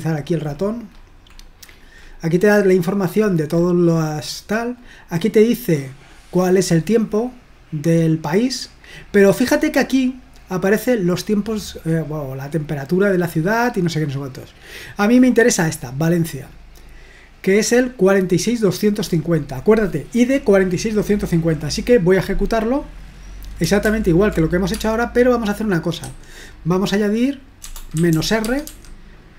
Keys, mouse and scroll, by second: 0.0-4.6 scroll up 4, 4.6 scroll up 1, 4.8-5.4 scroll down 2, 5.5-6.0 scroll up 2, 8.6-9.2 scroll up 2, 10.1-10.8 scroll up 2, 13.4-14.0 scroll up 2, 15.2 click, 17.8 click, 21.4 click, 23.8 ctrl+p, 24.8 space, 26.0 ', 27.7-29.1 typing.